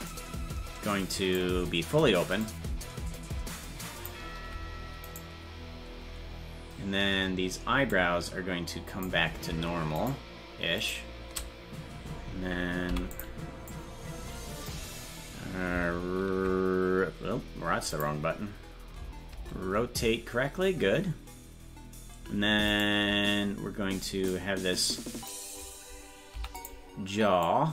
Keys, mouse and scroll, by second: 0.1-1.4 drag, 2.4-4.1 drag, 5.2 right click, 7.9-9.0 drag, 10.0-12.9 shift+right drag, 12.9 i, 13.7 click, 23.0 right click, 24.3 click, 26.3 i, 27.4-27.7 drag.